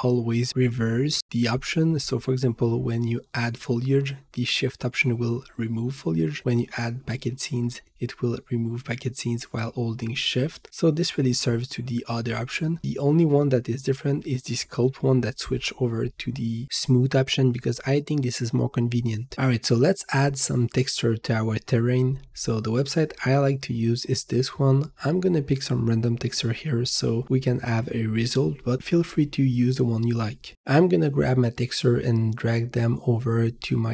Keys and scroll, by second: 3.5 v, 8.6 v, 12.9 v, 18.9 Return, 26.8 Return.